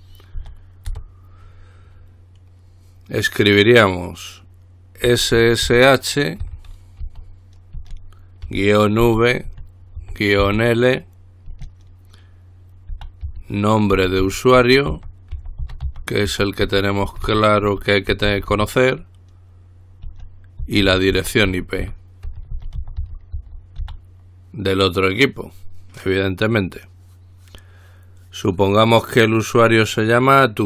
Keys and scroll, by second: 0.6 typing, 1.1 Return, 5.3-7.2 typing, 8.7-10.6 typing, 13.1-19.2 typing, 20.6-24.5 typing.